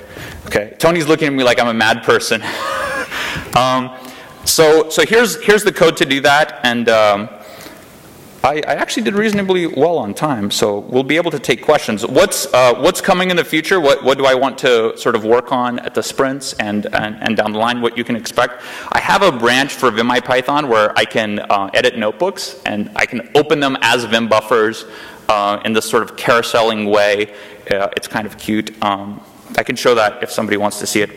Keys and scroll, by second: 3.3 shift+Return.